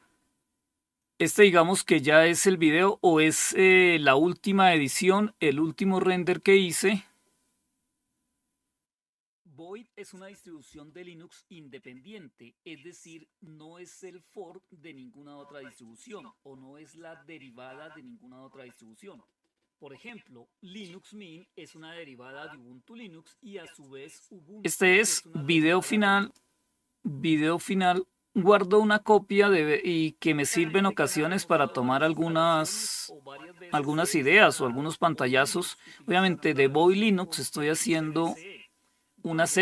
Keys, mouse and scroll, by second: 4.2 click, 25.6 click, 27.3 click.